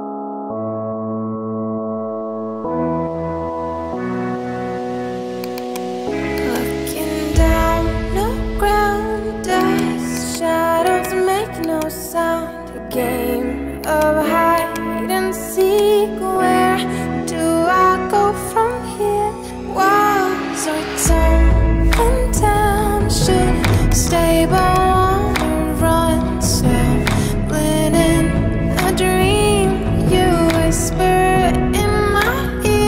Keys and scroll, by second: 2.4-4.3 typing, 6.7-8.7 typing.